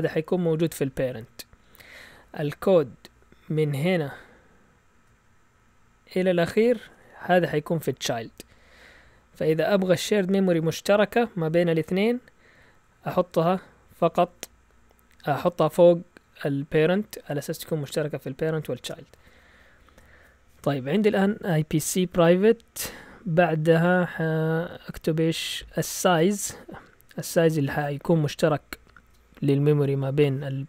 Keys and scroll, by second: 18.8 shift+super+z.